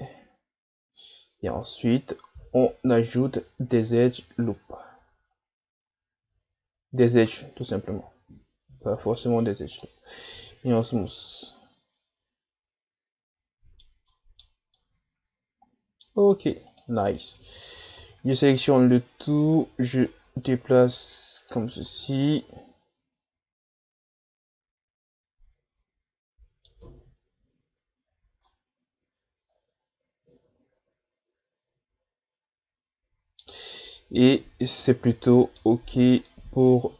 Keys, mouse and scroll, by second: 8.0 Tab, 8.8 w, 10.3 a, 10.7-11.2 scroll down 2, 11.2-16.2 middle drag, 16.2 scroll up 1, 16.7 right click, 17.0-17.4 middle drag, 17.4 Tab, 17.7 a, 18.0 a, 18.5-21.5 drag, 21.6 Tab, 21.8 a, 22.1 scroll down 4, 22.4-25.4 middle drag, 28.1-28.4 scroll down 1, 28.5-31.5 middle drag, 34.9-35.9 middle drag, 35.9-36.3 scroll up 1, 36.3-36.9 middle drag.